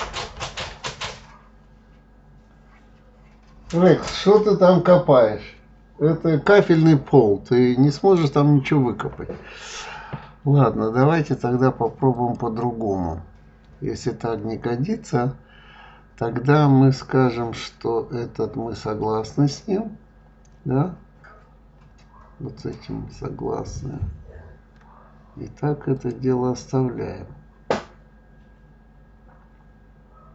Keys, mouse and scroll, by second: 12.1 click, 18.3-20.8 scroll up 9, 22.5 click, 25.9 click.